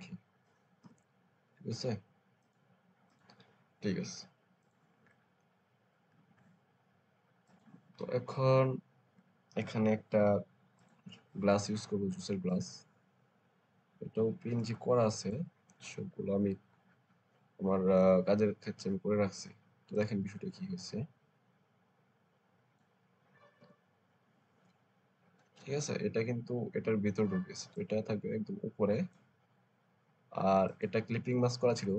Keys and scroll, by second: 0.7 Return, 23.5 Return.